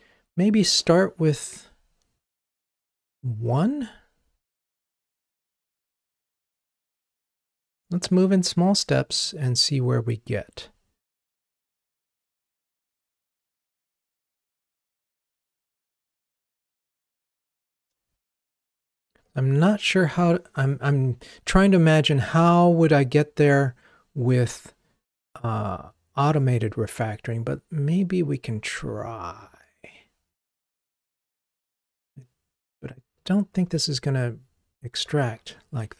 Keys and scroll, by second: 34.1 alt+super+m, 35.8 Escape.